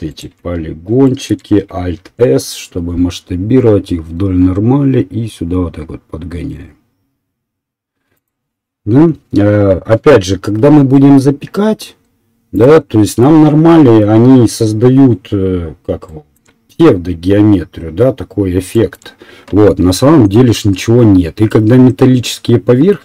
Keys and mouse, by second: 0.1 alt+right click, 0.2-8.9 alt+middle drag, 2.1 alt+s, 10.7 s, 11.7-23.0 middle drag.